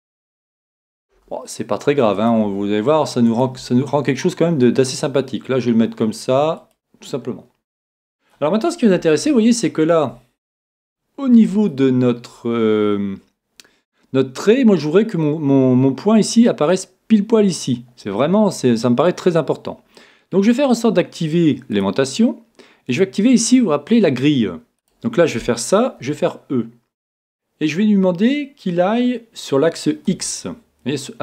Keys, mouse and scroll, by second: 0.4 e, 1.1 e, 6.7 click, 7.9-8.4 scroll down 1, 9.1-12.7 middle drag, 18.1 middle click, 18.3-19.4 scroll up 1, 19.4 middle click, 20.0-21.0 scroll down 1, 21.0 middle click, 21.8-24.7 drag, 26.0-27.4 right drag, 26.0 e.